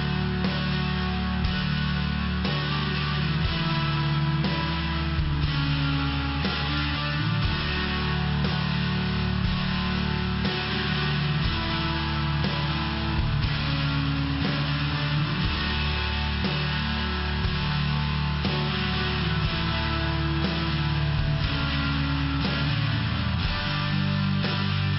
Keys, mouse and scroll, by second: 0.7 click, 2.0 click, 3.6 click, 12.0 click, 12.9 click, 14.5 click, 18.3 click, 20.6 click, 23.8 click.